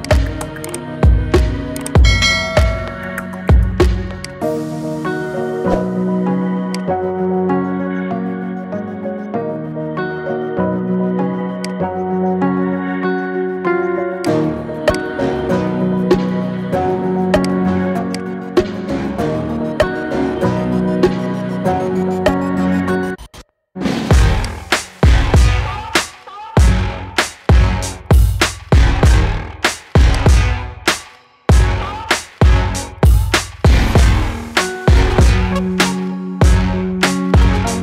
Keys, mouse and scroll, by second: 0.7 g, 4.5 middle click, 5.2-5.9 scroll down 6, 6.5-9.6 shift+drag, 9.7 shift+d, 12.0 g, 14.7 click, 15.5 g, 17.9 shift+click, 18.4 scroll down 4, 18.9-20.0 shift+middle drag, 20.0 shift+d, 24.7-26.0 shift+middle drag, 26.0 shift+d, 30.6-31.7 shift+middle drag, 31.7 shift+d, 37.3-37.8 scroll down 10.